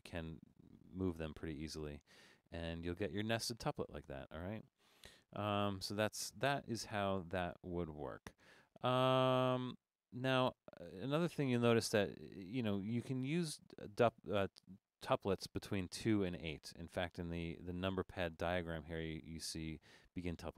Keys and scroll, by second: 10.5 BackSpace.